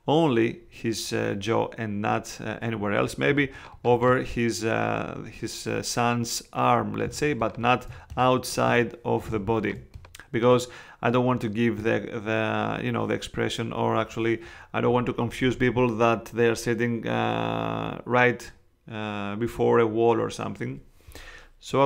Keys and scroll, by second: 3.3 space, 7.0 space, 9.2 space.